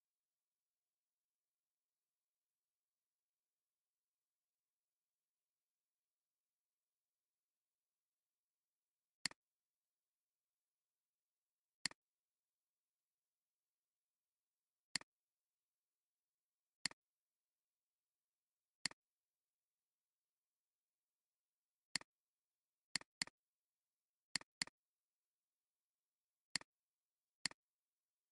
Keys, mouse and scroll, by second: 11.3 alt+scroll down 1, 11.7 space, 12.3 space, 14.8 right click, 21.1 scroll down 1, 23.0 double click, 25.3 scroll down 1, 27.4 ctrl+click.